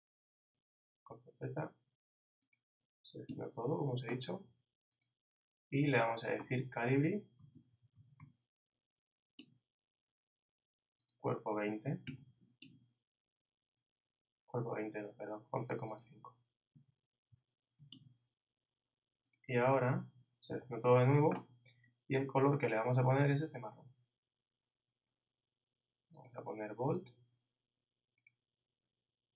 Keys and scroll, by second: 1.1 shift+super+z, 3.3 shift+super+a, 7.1-8.7 typing, 9.4 shift+Return, 12.0 shift+2, 12.6 shift+Return, 16.7 shift+i, 17.3 shift+,, 17.8 shift+5, 17.9 shift+Return, 20.6 shift+super+a.